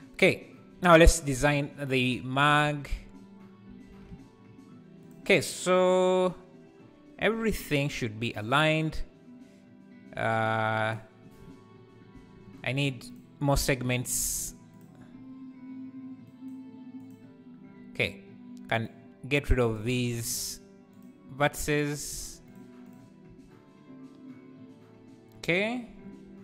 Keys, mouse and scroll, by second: 2.0 Tab, 2.3 a, 3.8 alt+s, 8.3 v, 10.9 click, 13.1 shift+click, 13.5 shift+click, 14.8-19.7 right drag, 19.7 click, 19.9 x, 22.9 x, 23.3 Tab.